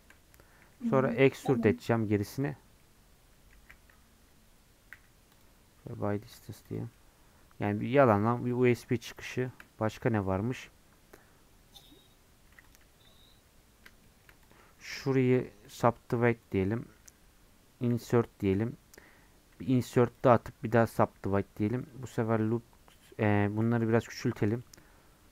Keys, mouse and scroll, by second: 0.6 e, 2.6 scroll down 3, 2.8 middle click, 3.6 a, 5.9 scroll down 2, 6.3 Tab, 6.7 click, 6.9-8.1 middle drag, 8.1-8.5 scroll up 3, 8.5-12.7 middle drag, 12.7 click, 12.8 Tab, 14.0 shift+middle click, 14.5 click, 14.9-16.5 scroll up 1, 16.5 right click, 16.9-17.9 scroll up 1, 17.9 i, 19.5 i, 21.0-23.5 right drag, 23.5 s.